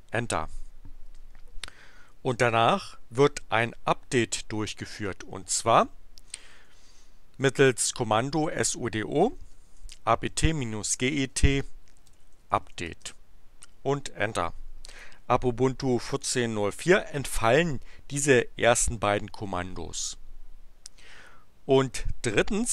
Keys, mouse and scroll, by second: 1.0 Return, 5.7-7.4 typing, 9.4-13.2 typing.